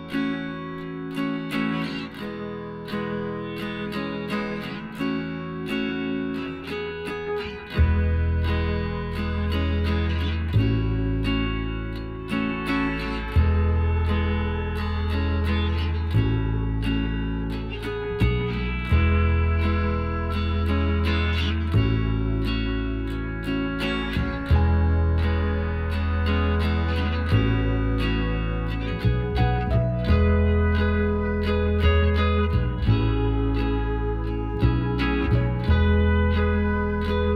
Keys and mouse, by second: 2.1 click, 2.4-3.7 middle drag, 3.4 ctrl+z, 4.4-6.2 middle drag, 6.2-8.0 drag, 6.8-9.8 right drag, 7.7 KP_1, 8.3 z, 9.8 middle click, 10.5 g, 14.8-16.3 middle drag, 16.3 KP_1, 16.4 middle click, 17.3-19.0 right drag, 18.4 b, 21.5-23.1 drag, 22.6-24.4 middle drag, 23.6-25.2 right drag, 24.4 b, 25.8-27.5 drag, 27.6 b, 28.7 s, 30.5 middle click, 31.6 z, 31.9-33.5 middle drag, 33.9 a, 34.7-36.9 drag, 36.9 Tab, 37.2-37.3 right drag.